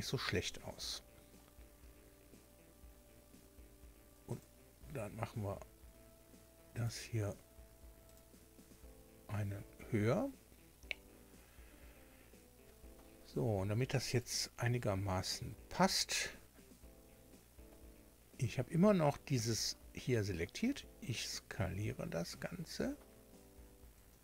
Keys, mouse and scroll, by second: 2.0 scroll down 2, 4.3 click, 6.7 click, 8.1 click, 14.1 right click, 20.4 s.